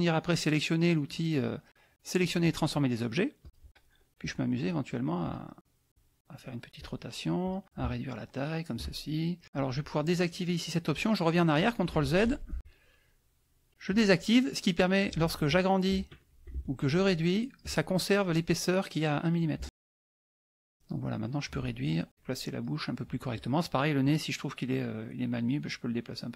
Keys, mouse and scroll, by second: 3.4 click, 4.2 click, 5.2 click, 5.9 click, 6.8 click, 7.4 click, 7.8-8.9 shift+drag, 11.9 ctrl+z, 13.8 click, 15.3 ctrl+shift+click, 16.9 ctrl+shift+click, 19.6 ctrl+z, 20.1 ctrl+z, 20.7 ctrl+shift+click, 21.8-22.8 ctrl+shift+drag, 23.3 click, 24.0-26.3 drag.